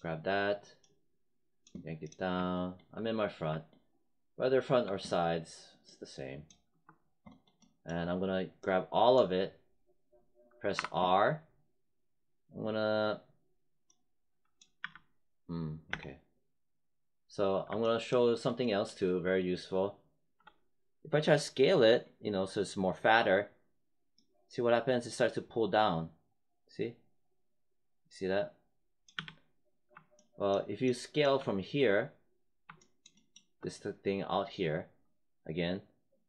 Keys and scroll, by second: 10.7 r, 14.7 z, 15.8 space, 29.0 z.